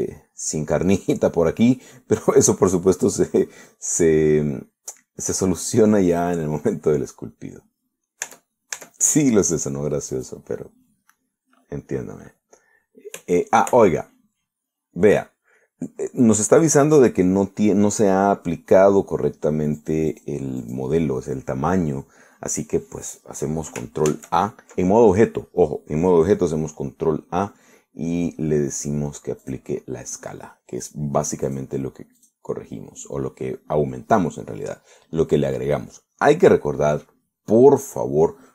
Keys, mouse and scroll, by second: 0.3 right click, 0.8 Tab, 1.6 middle click, 2.8-7.0 drag, 9.3 Tab, 10.5 click, 11.2 click, 20.8 click, 21.7 click, 25.1 ctrl+a, 30.5 click, 32.5 click, 33.3 click.